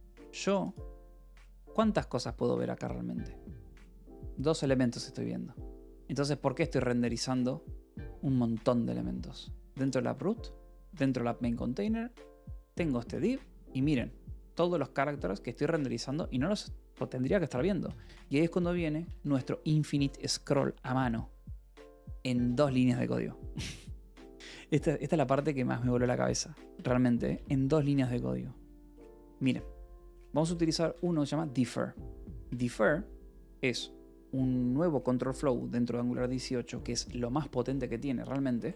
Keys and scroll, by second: 19.0 w, 21.6 Escape, 22.3 k, 25.3 :, 26.4 j, 26.7 Return, 27.0 j, 27.2 Return, 28.4 alt+Tab, 28.8-33.0 typing, 29.2 Escape.